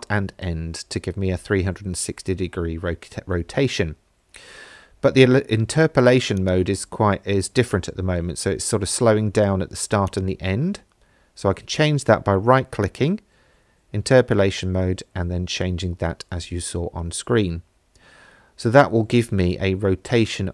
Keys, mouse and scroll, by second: 4.2 space, 6.4-6.7 drag, 10.1-13.1 right drag, 14.5 space.